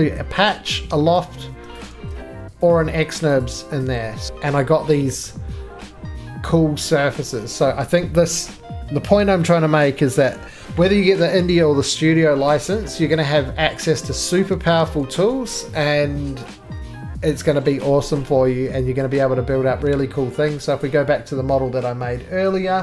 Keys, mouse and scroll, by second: 1.7 click, 1.9 ctrl+z, 2.7 click, 3.4 click, 4.3 click, 4.3 right click, 4.3 scroll, 5.2 middle click, 6.8-7.6 scroll, 7.6 middle click, 7.9 scroll, 12.4 scroll, 12.9 middle click, 13.0-13.4 scroll, 14.0 middle click, 14.2-16.4 scroll, 18.4 scroll, 18.9 middle click, 19.2-20.0 scroll, 20.8 click, 22.6 middle click.